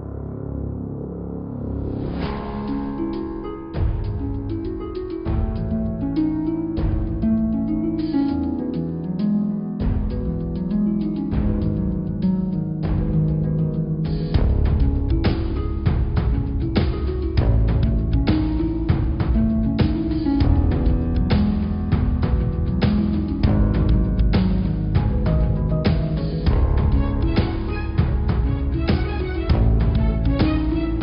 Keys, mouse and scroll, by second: 0.0-2.1 scroll up 3, 2.1 x, 2.9 click, 4.0 shift+d, 6.6 click, 7.0-9.4 scroll up 7, 9.4 click, 10.0 Tab, 10.4 click, 10.7 Tab, 11.0 middle click, 11.5-12.0 scroll down 10, 12.0 middle click, 12.7 click, 13.2-14.6 scroll up 7, 14.6 middle click, 15.0-15.6 scroll down 8, 15.6 middle click, 16.2 scroll up 2, 16.6 middle click, 17.1 click, 17.4-18.8 middle drag, 18.8 s, 21.2 click, 21.5 middle click, 22.1 scroll up 2, 22.2 middle click, 22.7 click, 23.0 Tab, 23.3 click, 24.3 s, 26.0-28.3 middle drag, 30.0 Tab, 30.3 scroll down 1, 30.5 middle click, 30.9 scroll up 3.